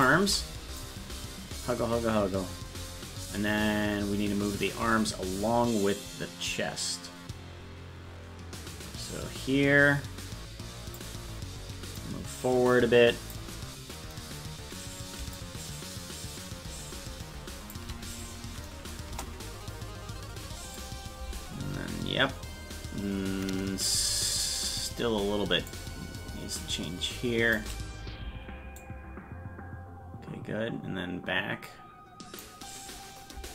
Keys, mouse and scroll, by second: 0.2 shift+right click, 0.8-11.0 drag, 12.0-13.4 drag, 15.4-17.8 shift+drag, 19.1 KP_0, 20.8-23.9 drag, 25.7-27.6 shift+drag, 28.8-32.4 drag.